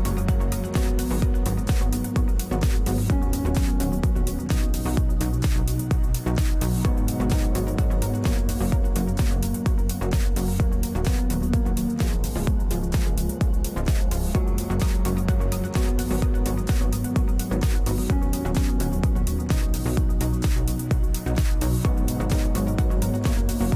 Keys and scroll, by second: 10.2 space, 10.6 space, 11.4 space, 12.6 space.